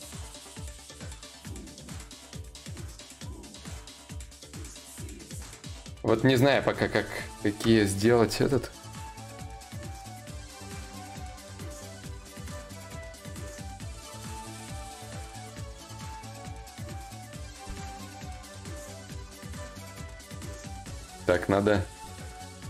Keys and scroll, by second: 16.8 ctrl+z, 17.2 ctrl+z, 17.6 ctrl+z, 18.6 ctrl+z, 19.2 ctrl+z, 19.6 ctrl+z.